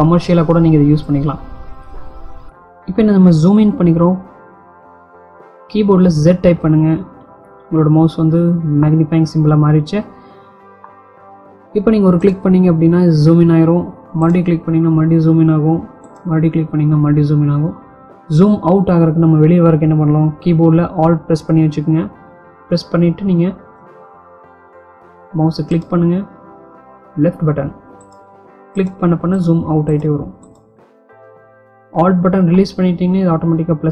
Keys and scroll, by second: 5.3 z.